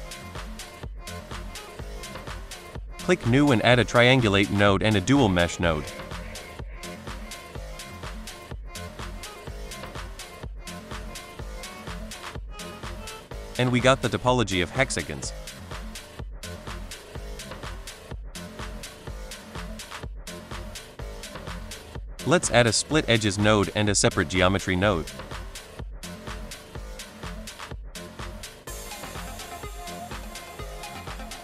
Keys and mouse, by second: 0.6 click, 1.8 middle drag, 3.3 middle drag, 4.0 n, 4.5 click, 4.8 click, 5.5 click, 5.7 shift+a, 7.9 click, 8.3 middle click, 8.7 shift+a, 12.2-12.5 drag, 13.6 shift+middle drag, 15.5 shift+middle click, 16.3 shift+middle click, 17.7 middle click, 18.1-18.4 drag, 18.9-19.3 drag, 19.5 click, 20.8 \, 22.4 middle click, 22.8 shift+a, 25.4 click, 25.9 click, 26.4 middle drag, 26.8 click, 27.4 drag, 27.9 click, 28.1 shift+a, 30.7 click, 31.0 middle click.